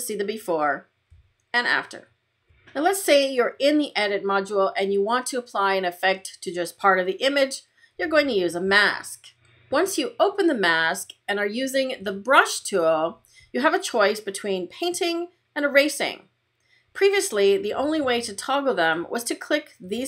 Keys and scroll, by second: 1.0 \.